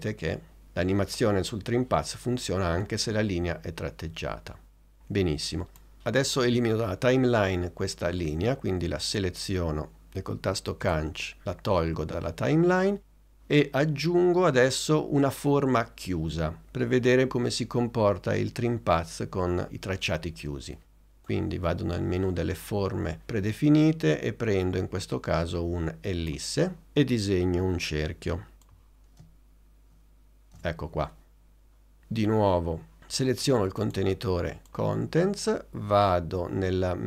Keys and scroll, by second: 11.0 BackSpace.